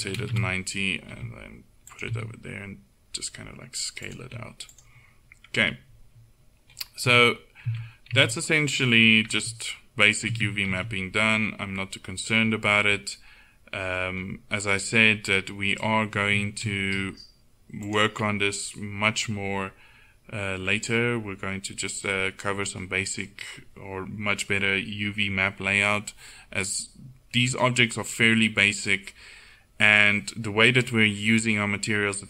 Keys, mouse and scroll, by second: 1.3 g, 2.1 s, 4.3 g, 7.1 Tab, 7.7 Tab, 8.2 a, 9.5 Tab, 10.4 Tab, 10.8 a, 16.4 s.